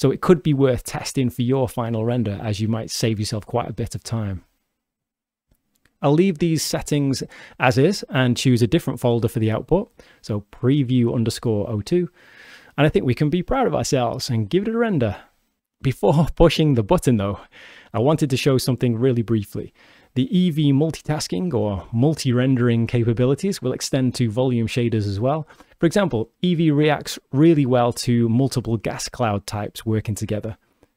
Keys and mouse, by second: 6.8 click, 8.1-9.4 drag, 19.0-19.6 alt+drag, 22.5 click, 30.2 shift+d.